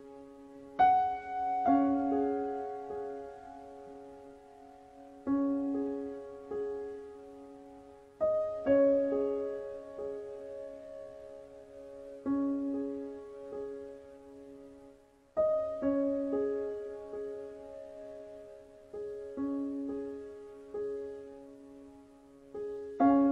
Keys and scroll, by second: 18.8 space.